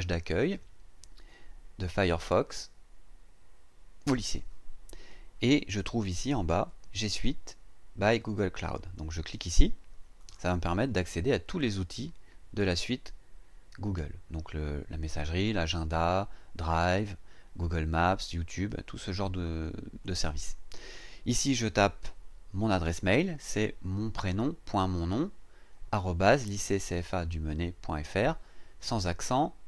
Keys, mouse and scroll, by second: 10.2 click.